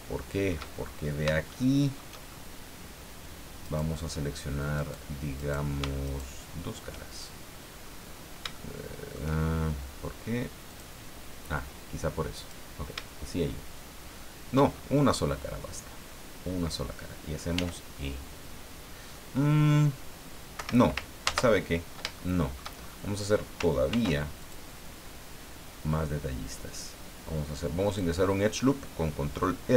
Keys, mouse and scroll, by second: 0.8-1.3 shift+scroll up 4, 1.5 shift+click, 2.3 shift+scroll up 2, 3.6 click, 4.7 click, 5.4 click, 6.0 shift+right click, 7.8-8.1 scroll up 1, 8.5 shift+click, 10.7 click, 12.4 right click, 14.7 shift+scroll down 1, 15.3-16.9 middle drag, 17.5 e, 20.5 Escape, 21.2 ctrl+z, 22.2 shift+middle click, 22.8-23.1 shift+scroll up 2, 23.9 ctrl+r, 24.4 ctrl+click, 27.8 click.